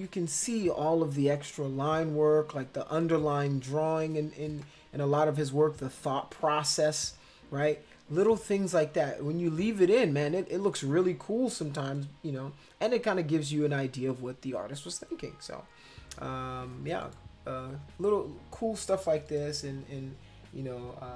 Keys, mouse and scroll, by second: 3.0 click, 4.5 click, 8.2 click, 11.9 click, 17.0 click, 19.3 click.